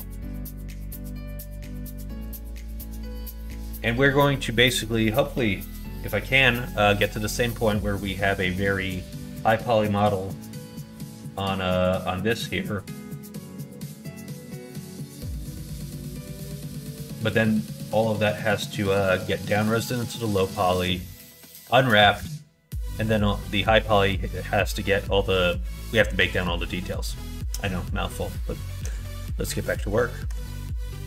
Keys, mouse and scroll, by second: 6.4 middle click, 7.0 middle click, 7.5 middle click, 7.9 middle click, 8.3 middle click, 8.9 middle click, 12.9 middle click, 13.3 shift+middle click, 13.8 middle click, 14.4 middle click, 15.2 middle click, 15.6 shift+middle click, 16.2 middle click, 16.8 middle click, 26.7 middle click, 28.1 middle click, 28.8 middle click, 29.4 middle click.